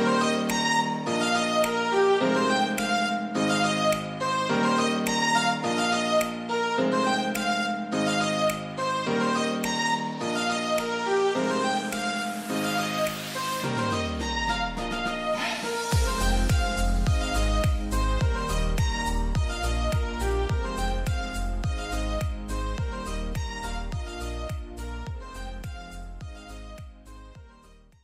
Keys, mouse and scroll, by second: 4.1 right click, 5.1 click, 5.1 typing, 8.5 click, 9.3-11.1 scroll up 1.